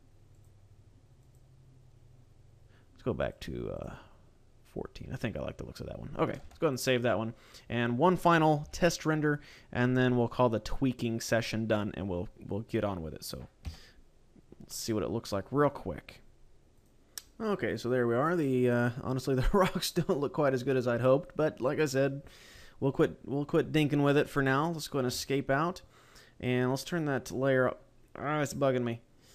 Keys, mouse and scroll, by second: 0.3 click, 1.0 click, 3.1 click, 3.5 click, 6.3 ctrl+s, 8.6 shift+middle click, 25.0 Escape, 25.5-26.5 scroll down 2, 28.6-28.9 scroll up 3.